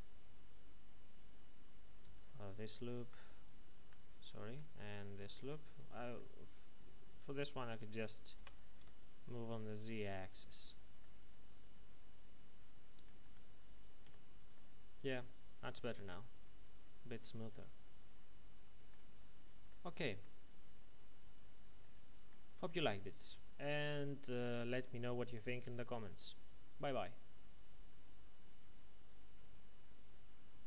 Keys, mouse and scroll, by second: 2.0 a, 2.7 ctrl+alt+right click, 3.7 a, 4.1 alt+shift+right click, 6.1 middle click, 8.3-8.8 typing, 10.1 click, 11.0 middle click, 13.2 Tab, 14.0 z, 14.5 middle click, 19.1-19.5 scroll down 1, 20.0 shift+middle click, 20.4-20.8 scroll up 1, 20.8-21.7 scroll down 1, 29.3 click.